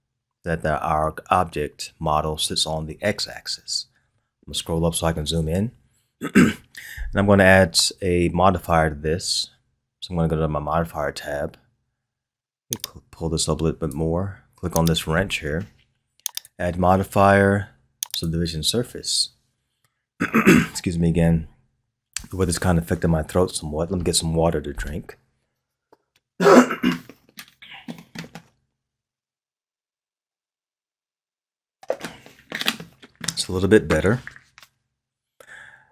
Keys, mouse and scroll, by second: 3.9-5.7 scroll up 5, 5.7-8.7 scroll down 1, 12.7-14.9 drag, 16.3-19.3 drag.